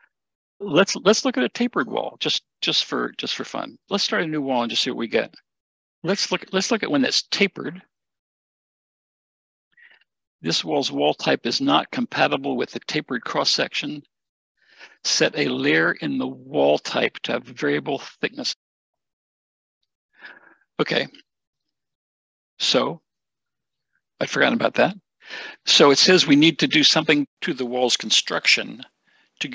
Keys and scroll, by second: 4.7 Escape, 5.1 Escape, 5.1 w, 5.5 a.